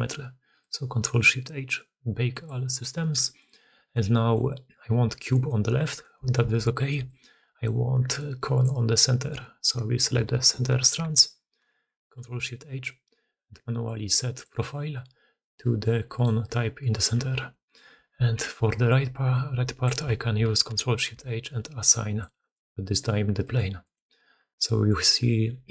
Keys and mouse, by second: 0.0-25.7 typing, 3.1 click, 3.7 alt+a, 3.9-4.2 drag, 6.3 alt+a, 11.6 ctrl+shift+h, 16.1-17.7 middle drag, 17.8 alt+a, 20.7 ctrl+shift+h, 24.4-24.8 middle drag.